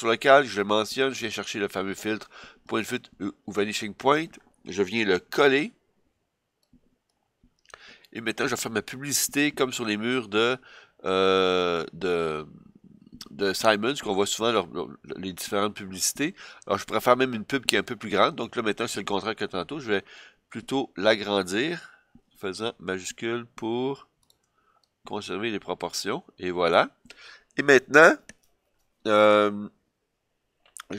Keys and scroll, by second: 5.3 super+v.